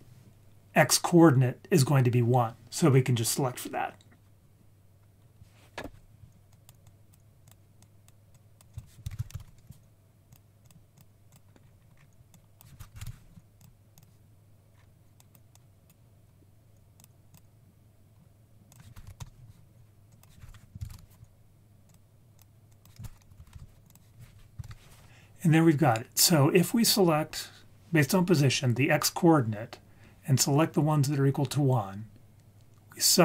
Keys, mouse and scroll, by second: 5.2-5.8 scroll down 1, 5.8 click, 5.8-6.1 scroll down 2, 6.5 click, 6.8 click, 7.4 click, 8.3 click, 8.7 shift+click, 9.0 shift+a, 10.9-11.3 drag, 11.6-12.1 scroll down 4, 11.9 scroll up 3, 12.3 click, 13.5 click, 13.9 click, 14.7-15.3 scroll up 3, 15.5 click, 17.0-17.4 drag, 18.7 click, 20.1-21.9 drag, 22.4 click, 22.7 click, 23.9 click, 24.6 ctrl+s, 26.2-26.8 scroll down 1.